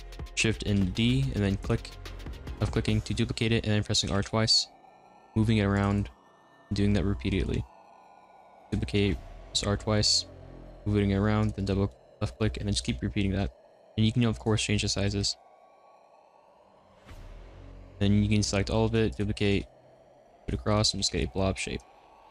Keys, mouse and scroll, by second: 0.7 shift+d, 4.1 r, 6.2-8.2 middle drag, 8.2 shift+d, 8.8 r, 11.9-13.9 middle drag, 13.9 s, 15.1 shift+d, 15.5 r, 16.6 s, 17.2 a, 18.8 shift+d, 19.4 r, 20.3 r, 20.9 r, 22.0 middle click, 22.1-22.3 typing.